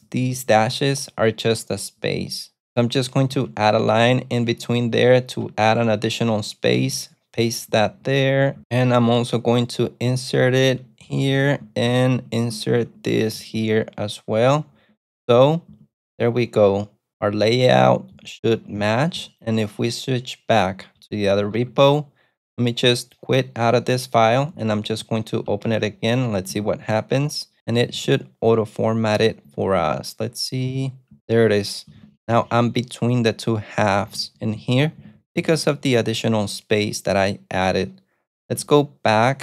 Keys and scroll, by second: 0.0-1.0 typing, 3.5 ctrl+v, 3.7-6.2 typing, 7.5-8.5 typing, 10.1-19.8 typing, 21.6 ctrl+super+F2, 24.8 alt+q, 25.5 v, 25.7 Return, 26.6-28.6 typing, 29.5 ctrl+d, 29.9 ctrl+d, 30.8 ctrl+d, 31.8-36.6 typing, 38.3-39.2 typing.